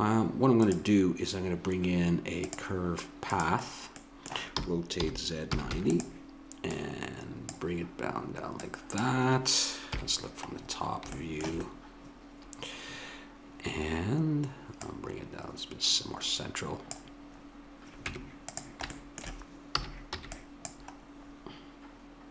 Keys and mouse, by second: 3.6-5.8 middle drag, 4.5 r, 6.7-7.5 drag, 9.9 KP_7, 13.1 middle click, 13.6-14.8 middle drag, 14.8 click, 18.1 Tab, 19.8 a, 20.1 b, 21.0 middle click, 22.2-22.3 drag.